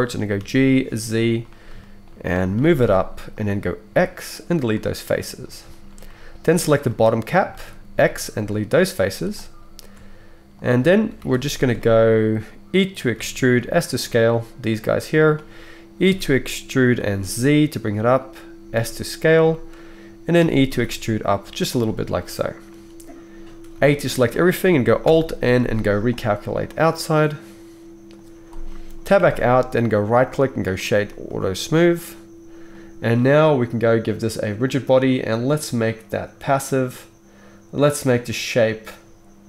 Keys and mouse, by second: 0.3 g, 1.4-11.5 middle drag, 2.5 g, 3.9 x, 7.9 x, 9.0 z, 11.2 alt+a, 11.5 shift+click, 11.6-16.1 shift+middle drag, 13.1 e, 16.1 e, 18.6 s, 19.6-29.8 shift+middle drag, 20.4 e, 23.7 a, 25.0 alt+n, 29.1 Tab, 29.8-39.4 right drag, 34.6-39.4 drag, 34.6-39.4 middle drag.